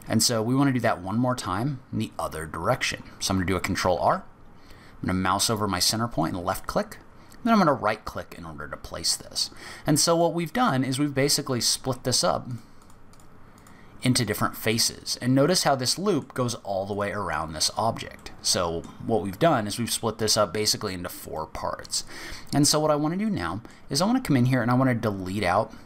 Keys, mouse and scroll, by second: 3.9 ctrl+r, 8.3 middle click, 10.5 click, 11.8 3, 12.1 click, 12.4 click, 12.8 click, 13.1 click, 14.2 click, 14.3 middle click, 15.0-15.5 scroll up 4, 15.5 middle click, 16.4-17.3 scroll down 2, 16.9 click, 17.7 click, 18.2 middle click, 19.2-19.5 scroll down 4, 19.5 middle click, 20.2-20.5 scroll down 3, 20.5-21.3 scroll up 6, 21.3 middle click, 23.3 middle click.